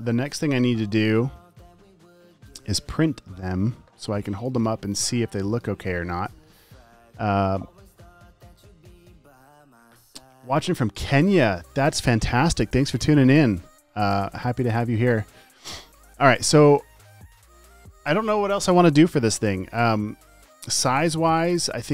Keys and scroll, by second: 4.3 space, 5.4 space, 5.6 space, 5.9 space, 21.4 t.